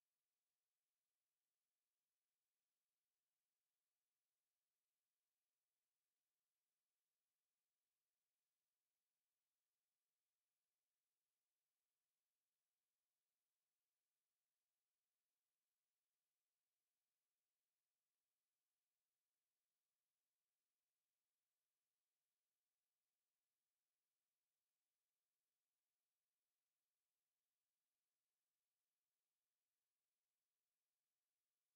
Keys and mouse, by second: 0.0 click, 0.6 shift+right click, 0.7 right click, 2.8 click, 3.1 shift+right click, 5.1 click, 9.7 ctrl+z, 10.0 ctrl+z, 10.3 ctrl+z, 11.4 w, 12.2 alt+click, 16.4 shift+right click, 18.4 click, 19.3 alt+click, 20.7 alt+click, 21.3 ctrl+z, 21.7 alt+click, 22.5 alt+middle click, 23.1 alt+click.